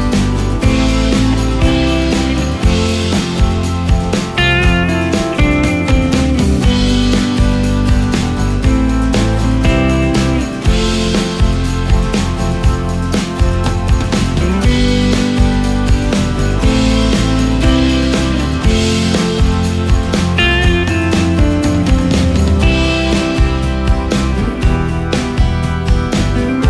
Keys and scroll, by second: 17.4 ctrl+space.